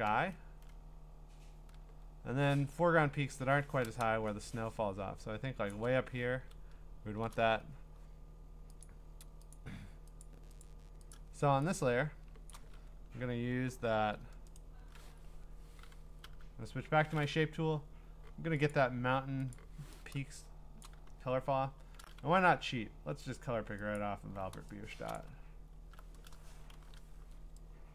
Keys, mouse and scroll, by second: 0.3 scroll, 0.9-1.9 scroll up 10, 1.9-2.5 scroll down 8, 3.2-3.7 scroll down 11, 5.1 scroll, 5.7 click, 6.7 scroll, 6.7-7.2 scroll down 6, 7.6 scroll up 4, 8.8 click, 9.5 click, 10.1 scroll, 10.2 click, 10.6 click, 11.1 click, 12.0-12.6 scroll, 12.5 click, 14.5 click, 14.6 right click, 16.2 Escape, 16.2 u, 18.7 click, 19.5 click, 21.8-22.4 scroll, 22.2 b, 23.9 alt+click, 25.0 alt+click, 25.1 click, 25.4 scroll, 26.7-27.9 ).